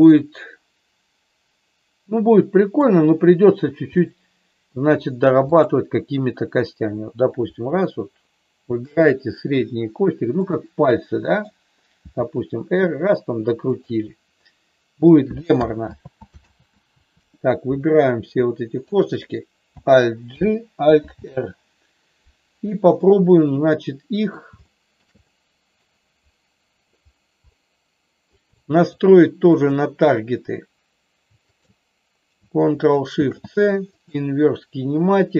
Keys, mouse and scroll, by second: 0.2-2.8 middle drag, 4.0 middle click, 8.8-10.3 shift+drag, 10.4-11.4 middle drag, 12.2 r, 15.9 ctrl+z, 16.4 ctrl+z, 18.3 click, 20.3 alt+g, 21.0 alt+r, 22.9-24.3 middle drag, 24.7 shift+middle click, 25.1 middle click, 27.4 middle click, 28.4 middle click, 29.4-30.8 drag.